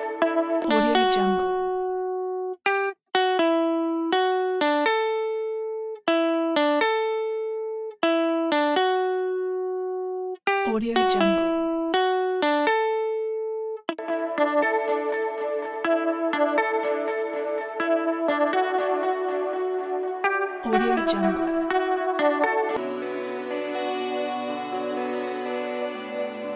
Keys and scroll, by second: 22.7 s.